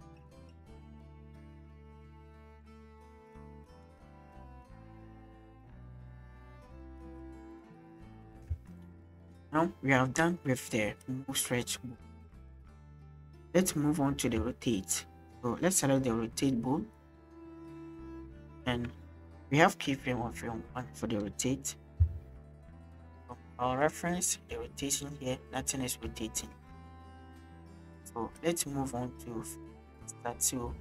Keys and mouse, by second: 0.4 click, 1.5 shift+click, 8.5 space, 9.4 click, 11.1 click, 11.3 click, 12.6-12.9 shift+middle drag, 14.5-14.9 shift+middle drag, 15.8 click, 18.2-18.8 shift+middle drag, 20.4-22.0 middle drag, 23.6 click, 24.2-24.6 middle drag, 26.2 shift+middle click, 27.2 middle click, 27.8 middle click, 28.4-30.8 drag.